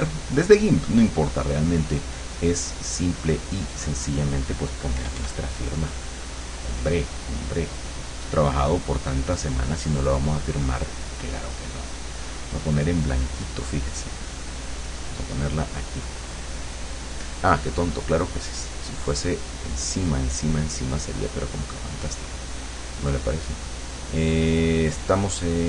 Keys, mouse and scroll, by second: 0.0 click, 5.0 KP_Add, 5.7 middle click, 5.8 click, 5.8 middle click, 6.0 click, 6.2 middle click, 8.0-9.4 drag, 12.2 click, 16.0-17.0 drag, 18.4 click, 24.4-25.6 drag.